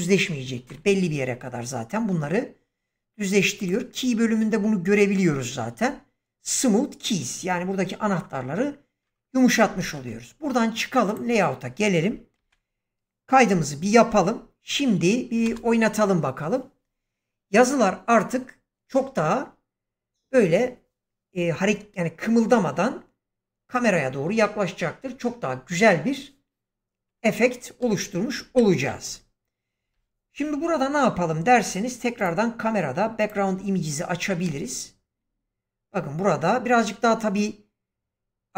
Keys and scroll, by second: 9.7 ctrl+space, 13.2 ctrl+s, 13.4 0, 15.3 space, 27.7 space, 28.4 shift+Left, 34.3 space.